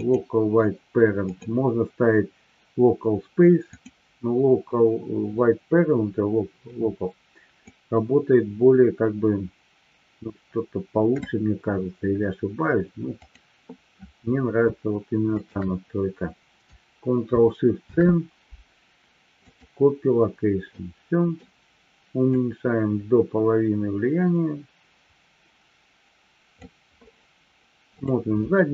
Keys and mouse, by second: 1.2-4.2 drag, 7.6-11.3 drag, 13.2 click, 15.3 shift+click, 17.7 ctrl+shift+c, 20.7-21.5 middle drag, 22.7-26.7 drag, 27.9 click.